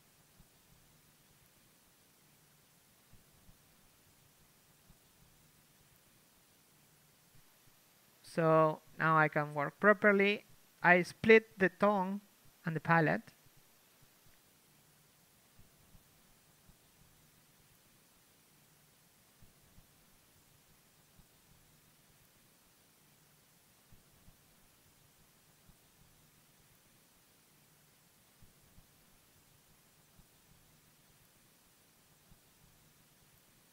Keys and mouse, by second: 2.1 ctrl+z, 3.2 z, 3.4 KP_5, 4.2 z, 4.5 z, 5.9 ctrl+z, 7.4 z, 7.6 z, 9.6 ctrl+e, 9.7 a, 12.2 ctrl+e, 12.4 a, 13.5 ctrl+Tab, 14.2 l, 14.9 u, 17.2 click, 17.9-19.2 ctrl+z, 19.2 a, 19.8 ctrl+Tab, 20.3 click, 20.5 a, 23.3-24.5 right drag, 26.2 right click, 26.9 ctrl+e, 28.8 ctrl+Tab, 29.0-33.7 typing, 31.6-33.7 drag.